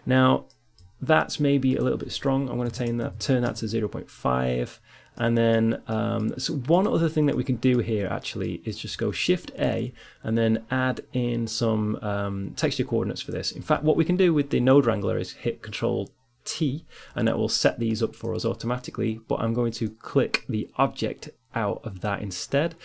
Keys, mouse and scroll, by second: 1.7-4.0 drag, 5.1 middle click, 6.2-8.2 drag, 9.4 shift+a, 9.6-10.6 drag, 13.7-15.6 drag, 17.0 ctrl+t, 17.3 click, 18.0-21.7 drag.